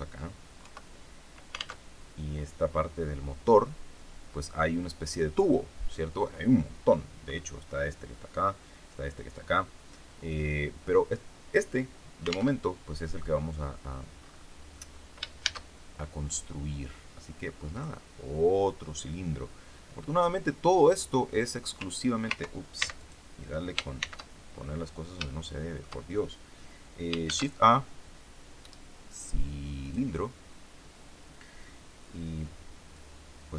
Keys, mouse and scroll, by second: 0.6 KP_3, 1.7 alt+Tab, 12.4 alt+Tab, 13.4-13.8 scroll down 2, 14.1-14.6 scroll up 2, 14.6-14.9 scroll down 2, 15.4 shift+a, 17.6 click, 19.0-20.3 drag, 22.7 ctrl+x, 22.9 ctrl+click, 23.9 shift+c, 24.5-25.0 shift+scroll up 3, 25.2 shift+click, 27.2 shift+a, 29.8 click, 32.9-33.5 drag.